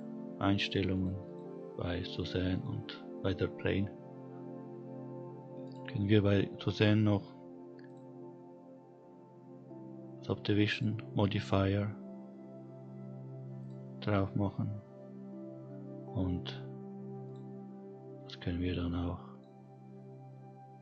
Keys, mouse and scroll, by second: 0.0 click, 0.8 click, 1.2 click, 4.3 click, 6.5 click, 9.4-12.4 drag, 13.0-15.9 scroll up 2, 15.9 click, 17.3-18.0 drag, 20.6-20.8 drag.